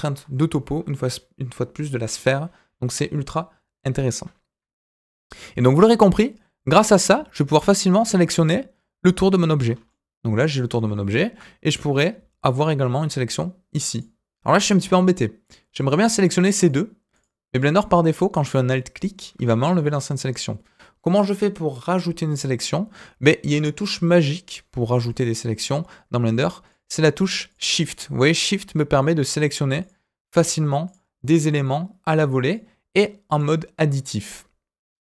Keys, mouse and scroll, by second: 0.5 KP_1, 5.1-7.1 scroll up 1, 7.8 alt+click, 9.7 scroll down 1, 9.8 middle click, 11.2 KP_1, 11.8 scroll up 2, 13.9 alt+click, 16.0 alt+click, 16.6 alt+click, 17.1 alt+click, 17.6 alt+click, 18.4 alt+click, 18.9 alt+click, 25.5 click, 26.6 shift+click, 27.4 shift+click, 28.2 shift+click, 28.9 shift+click, 29.8 shift+click, 30.8 shift+click, 31.6 shift+click, 32.4 shift+click.